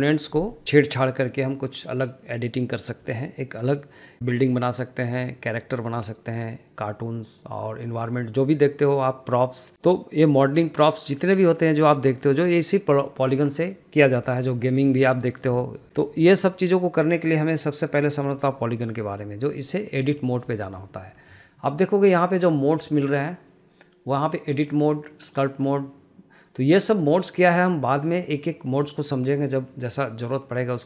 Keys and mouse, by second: 14.6 shift+middle click, 15.2 middle click, 16.4 shift+middle drag, 17.2 middle click, 19.8 shift+middle click, 20.1 shift+middle drag, 20.7 shift+middle click, 21.1 shift+middle click, 23.2-30.8 drag.